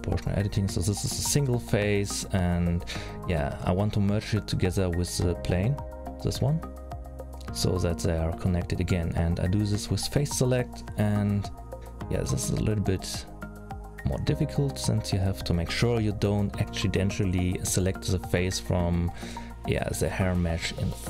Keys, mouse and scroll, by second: 1.3 middle click, 2.3 shift+click, 4.0 middle click, 4.5 click, 5.5 l, 6.9 g, 9.7 middle click, 10.3-10.7 scroll up 2, 10.7 middle click, 13.3 c, 16.2-16.7 scroll down 2, 16.7-17.4 scroll up 3, 17.4 c, 20.1 middle click.